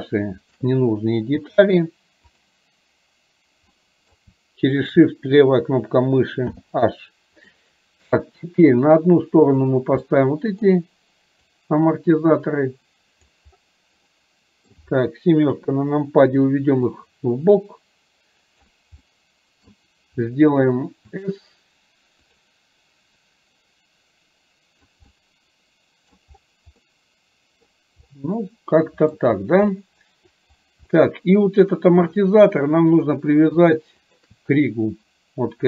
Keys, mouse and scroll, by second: 0.6 shift+click, 2.4 click, 3.9 middle drag, 4.9 shift+click, 7.6-8.1 middle drag, 10.1-10.6 middle drag, 11.6-13.4 drag, 14.2-14.7 middle drag, 17.1-18.9 drag, 19.1-19.9 middle drag, 23.5-25.0 drag, 25.1 scroll up 1, 25.4 middle click, 26.1 scroll down 1, 26.9-27.7 scroll up 1, 28.2-29.2 middle drag, 29.2 scroll down 1, 29.7-30.4 scroll up 1, 30.4 middle click, 30.4 scroll down 1, 30.9-31.5 middle drag, 30.9 scroll up 1, 34.1 shift+click.